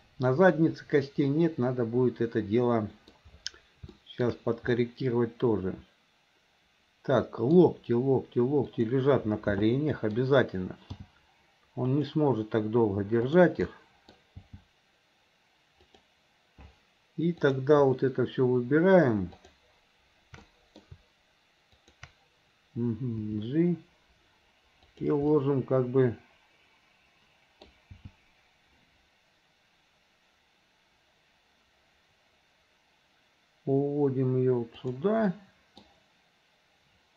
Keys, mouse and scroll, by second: 0.6-3.9 middle drag, 4.0 scroll up 1, 4.1 shift+middle click, 4.8 scroll up 1, 5.0-7.6 middle drag, 7.6 scroll down 1, 8.7 click, 9.7-10.2 middle drag, 11.0 g, 13.3 click, 13.7 middle click, 15.8 g, 17.4 click, 19.4 shift+click, 20.5-20.8 middle drag, 21.8 shift+click, 23.2 g, 25.4-28.6 middle drag, 25.4 scroll up 1, 27.7-28.6 scroll down 1, 28.6 g, 35.4 middle click.